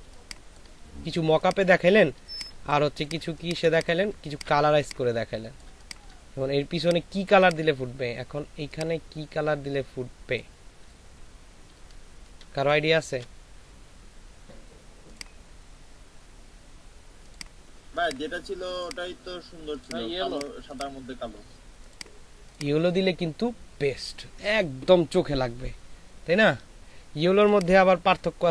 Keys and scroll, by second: 3.1 space, 12.5 ctrl+shift+[.